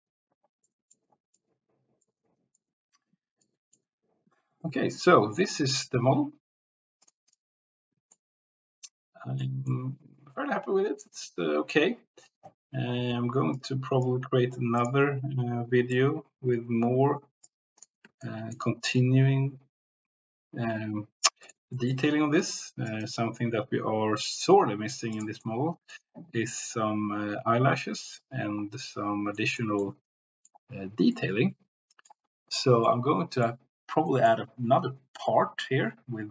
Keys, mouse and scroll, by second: 0.6 click, 1.5 click, 2.5 click, 3.4 shift+click, 7.0 click, 7.3 click, 8.3-9.5 drag, 9.8-11.1 drag, 11.3 click, 13.5 click, 14.7 click, 18.3 shift+middle click, 19.0-21.3 drag, 21.7 middle click, 22.3 click, 25.5 click, 26.5 click, 29.5 click, 29.9 click, 31.3 click, 32.8 click, 33.5 click.